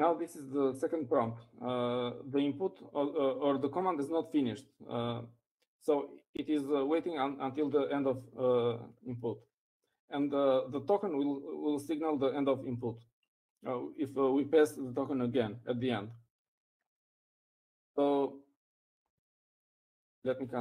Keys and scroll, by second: 1.2-1.9 typing.